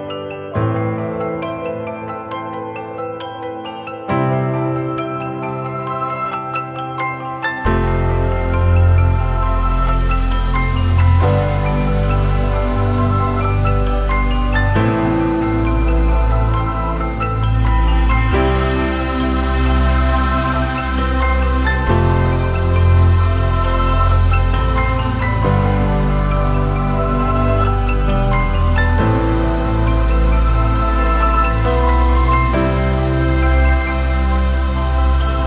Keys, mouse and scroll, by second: 0.2 [, 0.3 double click, 3.6 right click, 4.3 [, 4.5 [, 4.9 double click, 9.5 double click, 20.9-23.6 scroll down 1, 26.9 ctrl+=, 27.1 ctrl+=, 27.2 ctrl+=, 27.3 ctrl+=, 27.4 ctrl+=, 28.2 space, 29.5-30.3 typing, 31.5 typing, 32.9-33.3 typing, 34.5 double click, 34.9 typing.